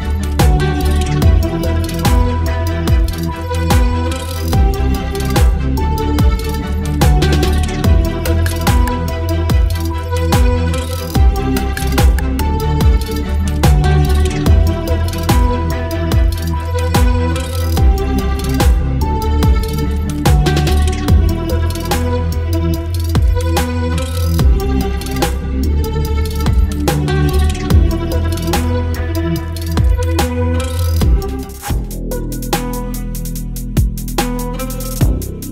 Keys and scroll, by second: 0.5 space, 1.0 space, 2.3 ctrl+BackSpace, 2.5 space, 3.1 space, 4.4 Delete, 4.5 space, 5.6 Delete, 5.8 space, 8.0 ctrl+BackSpace, 8.7 space, 9.8 v, 10.3 ctrl+t, 16.6 ctrl+t, 19.7 Return, 20.8 space, 22.3 space, 22.6 ctrl+t, 24.3 space, 24.5 Return, 26.4 Delete, 27.3 space, 28.8 Delete, 29.4 space, 30.3 v, 31.5 space, 32.3 space, 34.1 space, 34.3 Delete, 34.7 Delete.